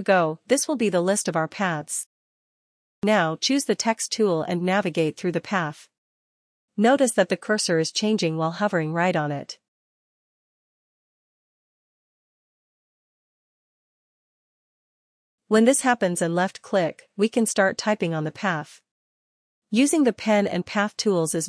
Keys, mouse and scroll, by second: 14.1 ctrl+click, 17.4 typing, 18.6-20.6 typing.